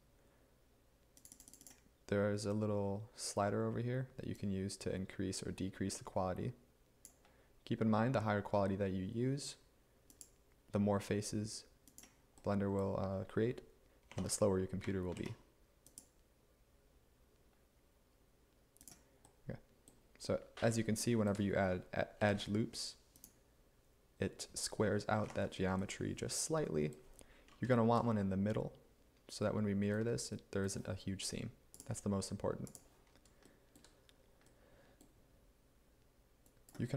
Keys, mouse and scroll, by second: 14.1 Tab, 15.2 ctrl+r, 22.2 ctrl+r, 25.3 Escape.